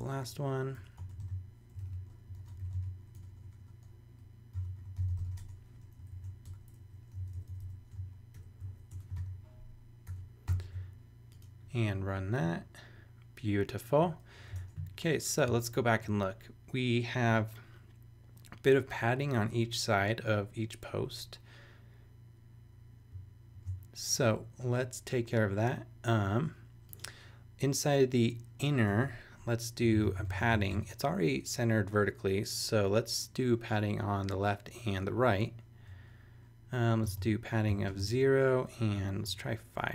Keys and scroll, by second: 0.2 \, 0.7 BackSpace, 1.0 Return, 1.2 super+v, 1.8 super+z, 2.3-3.2 typing, 4.3-5.7 typing, 6.0 shift+super+Tab, 6.1 shift+super+Right, 6.4 shift+super+BackSpace, 6.8 Down, 7.9 shift+super+Down, 8.3 shift+super+], 8.6 super+Right, 8.9 Return, 9.2 super+v, 10.1 super+[, 10.5 super+s, 23.5 super+Tab, 28.9 Return, 29.6-31.2 typing, 37.0 space, 37.7 0, 37.9 space, 39.2 shift+5.